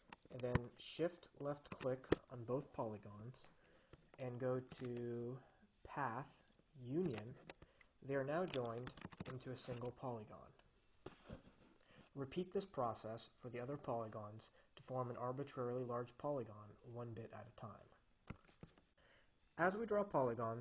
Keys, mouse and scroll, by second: 0.0 click, 2.0 shift+click, 5.0 click, 7.1 click, 9.1 s, 9.3 click.